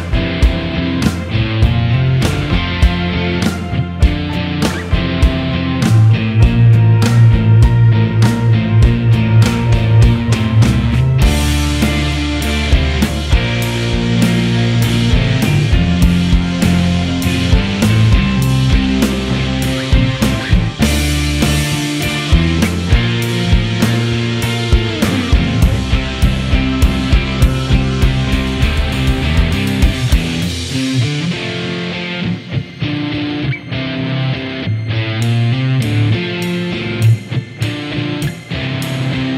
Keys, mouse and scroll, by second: 0.0 s, 0.3 middle click, 0.6 click, 0.8 middle click, 1.1 scroll up 1, 1.1 middle click, 1.2 scroll down 2, 1.3 middle click, 1.4 `, 1.6 middle click, 1.9 KP_3, 2.1 click, 2.7 middle click, 3.4 click, 3.6 middle click, 4.4 ctrl+d, 5.1 p, 5.3 Tab, 5.7 click, 5.9 Tab, 6.1 l, 6.2 middle click, 6.7 click, 6.9 middle click, 7.5 r, 8.2 middle click, 9.2 click, 9.4 click, 9.8 middle click, 9.8-10.4 scroll up 16, 9.9 shift+middle click, 10.0 shift+middle click, 10.4 g, 11.0 scroll down 5, 11.1 middle click, 11.2 middle click, 11.4 click, 12.2 scroll up 3, 12.3 shift+middle click, 12.4 ctrl+r, 12.6 click, 13.0 ctrl+z, 13.2 click, 13.3 KP_3, 13.7 ctrl+z, 14.0 click, 14.4 ctrl+r, 14.6 middle click, 15.2 alt+click, 15.3 middle click, 15.4 g, 15.6 right click, 15.6 middle click, 16.0 x, 16.2 middle click, 16.9 KP_3, 17.0 click, 17.9 click, 18.2 click, 18.4 shift+middle click, 18.4 click, 18.8 shift+middle click, 19.2 click, 19.4 e, 20.0 middle click, 20.5 scroll down 1, 20.5 middle click, 21.2 e, 21.6 scroll up 1, 21.7 shift+middle click, 22.0 ctrl+r, 22.4 click, 23.0 click, 23.9 ctrl+r, 24.4 click, 24.6 middle click, 24.9 scroll up 2, 25.0 shift+middle click, 25.4 shift+click, 25.7 f, 25.9 f, 26.0 click, 26.1 f, 26.3 scroll down 3, 26.3 middle click, 26.4 Tab, 26.6 middle click, 27.5 click, 27.6 middle click, 28.0 scroll up 1, 28.1 click, 28.3 middle click, 28.5 Tab, 28.6 middle click, 29.1 click, 29.2-30.1 typing, 29.7 alt+click, 30.3 middle click, 30.6 alt+click, 30.8 Tab, 30.9 click, 31.3 Tab, 31.4 Tab, 31.5 Tab, 31.6 click, 31.7 l, 31.8 l, 31.9 l, 32.0 l, 32.0 middle click, 32.5 Tab, 32.6 Tab, 32.7 Tab, 32.9 Tab, 33.1 click, 33.2 Tab, 33.3 Tab, 33.4 Tab, 33.4 middle click, 33.7 middle click, 33.8 click, 33.9 middle click, 34.2 Tab, 34.3 shift+middle click, 34.5 g, 34.8 p, 34.9 Tab, 35.2 click, 35.3 Tab, 35.4 middle click, 35.5 Tab, 35.5 middle click, 35.7 Tab, 35.7 middle click, 36.4 middle click, 37.0 click, 37.1 Tab, 37.2 middle click, 37.6 Tab, 37.7 click, 37.9 Tab, 37.9 Tab, 38.0 shift+click, 38.3 ctrl+l, 38.5 ctrl+j, 38.5 middle click, 38.6 Tab, 38.7 middle click, 39.0 Tab, 39.0 middle click, 39.1 click, 39.2 middle click.